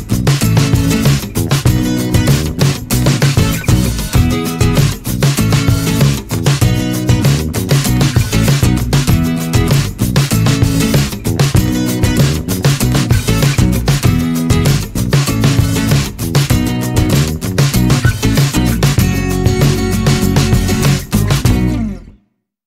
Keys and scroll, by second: 2.0-2.4 typing, 9.8-12.5 typing, 15.3-18.1 typing.